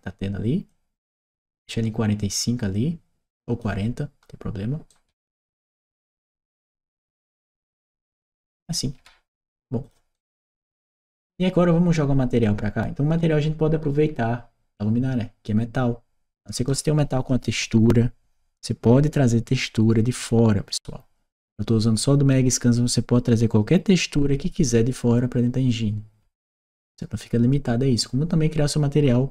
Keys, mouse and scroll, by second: 0.5-3.4 drag, 4.7-9.2 right drag, 5.8 w, 9.6 click, 9.9-11.1 right drag.